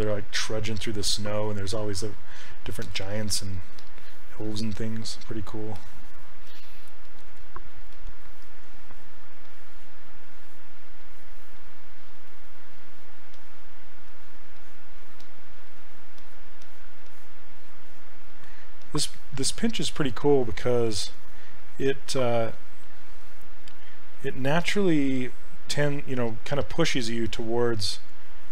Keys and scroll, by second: 6.5 s.